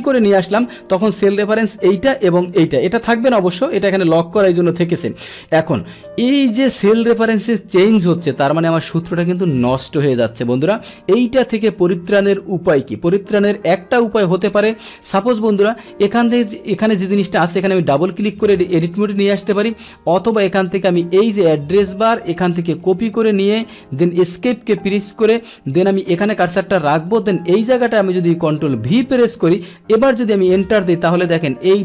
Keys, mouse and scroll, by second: 0.2 click, 0.4 click, 6.5 Return, 8.3 click, 14.3 click, 17.6 click, 17.8 click, 19.1 Return, 19.9 click, 20.7-22.1 drag, 22.9 ctrl+c, 23.7 Escape, 23.7 ctrl+c, 25.7 click, 27.1 click, 28.9 ctrl+v, 30.1 Return, 31.1 click, 31.7 click.